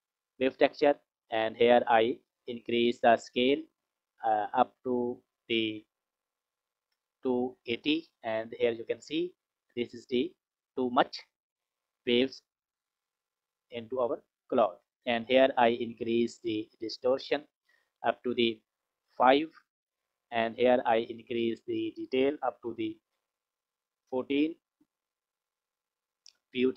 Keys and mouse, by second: 1.3 click, 4.5 click, 5.4-7.6 drag, 13.4 click, 16.0 click, 16.8-18.4 drag, 21.1 click, 21.9-23.3 drag.